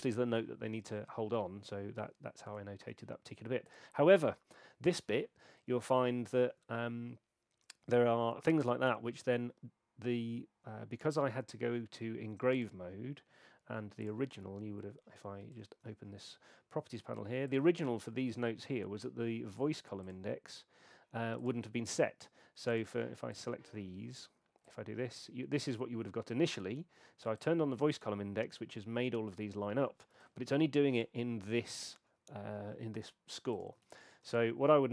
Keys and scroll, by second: 15.5 super+8, 30.2 super+8, 33.8 super+a.